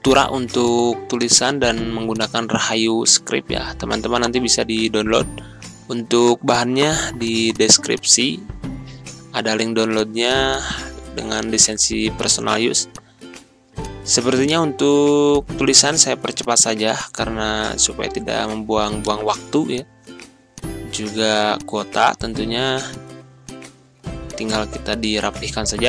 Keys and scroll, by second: 0.0 Return, 6.0 ctrl+k, 21.0 ctrl+a, 22.1 1, 22.2 3, 22.3 Return.